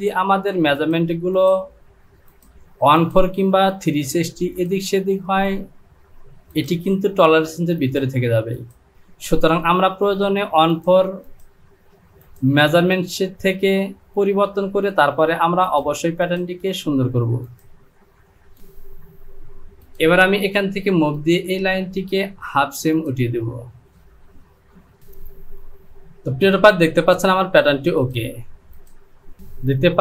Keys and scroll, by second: 25.0 Home.